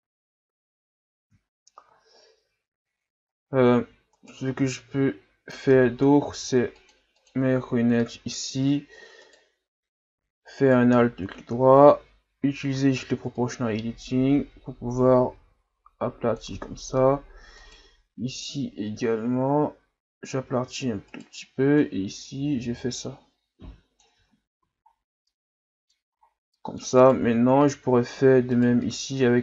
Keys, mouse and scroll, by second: 0.3 shift+scroll down 1, 1.4-2.8 shift+scroll up 10, 2.8-4.1 ctrl+scroll up 6, 4.1 right click, 4.5 Tab, 6.3 ctrl+r, 8.2-9.2 ctrl+scroll up 2, 9.2 right click, 10.6 alt+right click, 11.2-12.2 scroll up 1, 13.4-16.4 drag, 16.7-17.5 shift+scroll down 5, 17.6 alt+right click, 18.4-21.1 drag, 21.1 alt+right click, 21.8-24.2 drag, 24.2 Tab, 24.6 a, 24.9-25.2 scroll down 2, 25.2-26.1 middle drag, 26.1-26.5 scroll up 3, 26.5 middle click, 27.0 right click, 27.2 Tab, 27.6 middle click, 28.5 right click, 28.8 middle click.